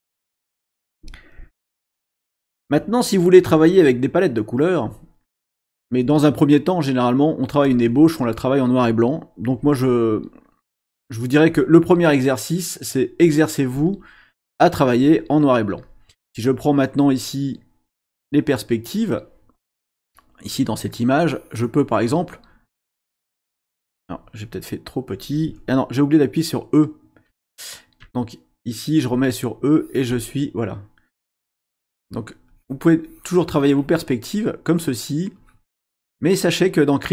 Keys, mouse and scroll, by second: 7.6 click, 10.0 shift+click, 11.5-13.2 shift+drag, 13.8 shift+click, 21.2 click, 22.7 click, 24.0-25.2 shift+drag, 28.0 e, 29.7 click, 32.5 click, 33.0 click, 35.4 click, 35.9 click.